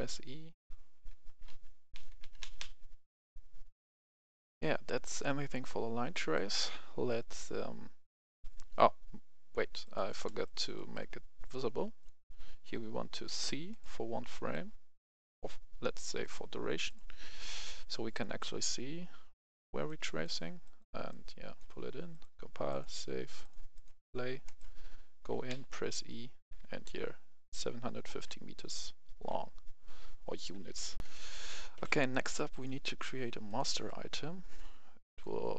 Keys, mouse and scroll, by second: 0.0-2.5 typing, 1.3 click, 4.3 click, 5.5 F10, 6.2-7.3 drag, 10.2 right click, 11.9 click, 14.2 right click, 15.2-22.0 drag, 24.4 right click, 25.4-29.2 typing, 30.9 click, 31.0 F10, 31.7 Escape, 32.4 click, 33.6 right click, 35.0 click.